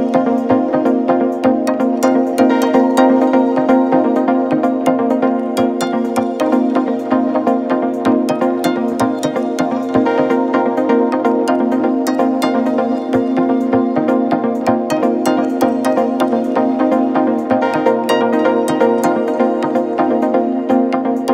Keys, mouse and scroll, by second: 1.2 ctrl+b, 7.1 g, 10.0 ctrl+r, 14.6-16.6 middle drag, 16.6 ctrl+r.